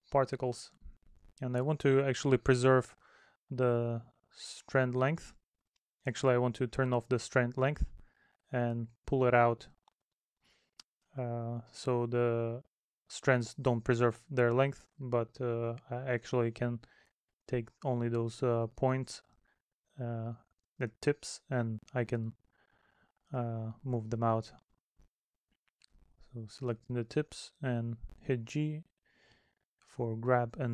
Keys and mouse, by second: 7.0 middle click, 9.2 middle click, 12.2 middle click, 14.7 middle click, 17.8 middle click, 19.3 middle click, 21.1 middle click, 22.5 middle click, 23.8 middle click, 24.7 middle click, 28.9 middle click.